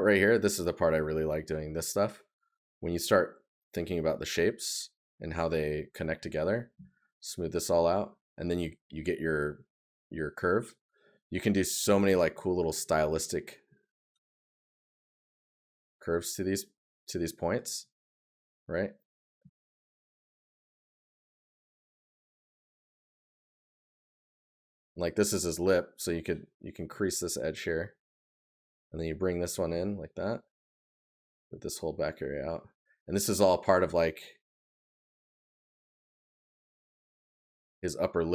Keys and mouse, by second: 1.7 right click, 10.5 right click, 20.9 right click, 29.5 right click, 37.3 right click.